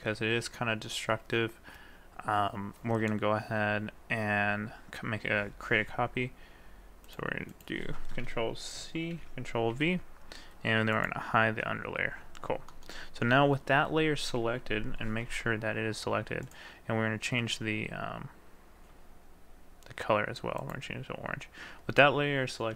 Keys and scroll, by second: 9.1 ctrl+c, 9.8 ctrl+v.